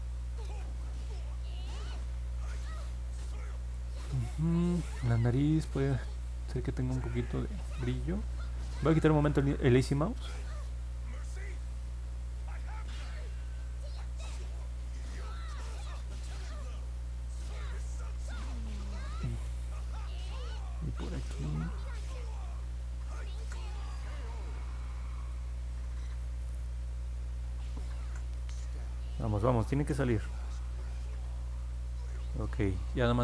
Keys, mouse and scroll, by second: 15.6 ctrl+z, 23.2 ctrl+z, 25.0 click, 27.9 ctrl+z.